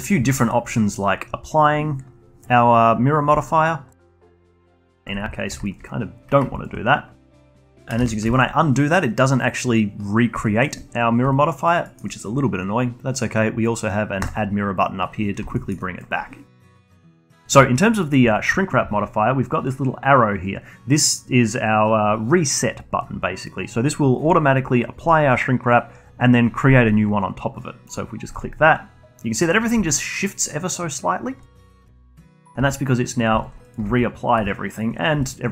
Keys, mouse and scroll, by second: 3.4-4.6 alt+drag, 4.6 ctrl+z, 5.0-8.0 alt+drag, 8.0 ctrl+z, 8.3-11.8 alt+drag, 11.8-14.2 alt+middle drag, 14.2-15.5 drag, 15.5 alt+middle click, 15.8-18.4 alt+drag, 18.4-21.4 shift+right drag, 29.5 scroll up 1, 29.8-31.8 alt+drag, 32.0-32.6 alt+drag, 32.6 g, 33.4-33.7 alt+drag, 33.8 g, 34.5-35.5 alt+drag.